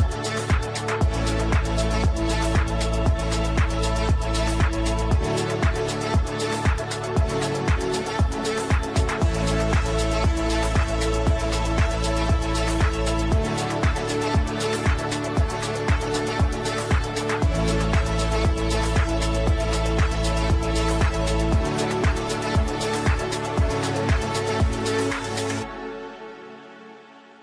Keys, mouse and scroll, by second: 1.1-3.2 typing.